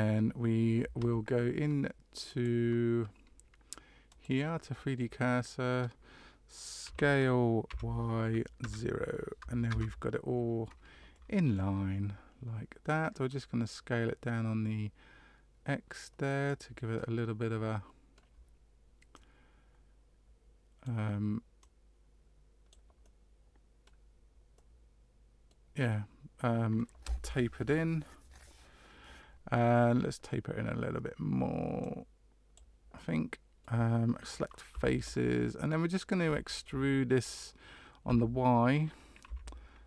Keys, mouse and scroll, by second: 2.2 click, 4.9 middle click, 6.8 s, 11.1 middle click, 13.2 click, 16.7 middle click, 19.1 click, 21.6 click, 23.0 middle click, 24.5 middle click, 25.7 middle click, 31.8 click, 32.9 middle click, 34.7 3, 35.6 middle click, 36.3 shift+middle click, 38.0 e.